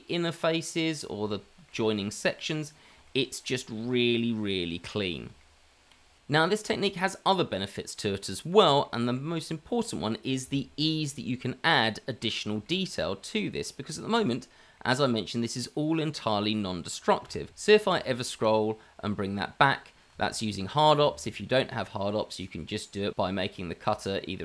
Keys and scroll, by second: 17.2 q.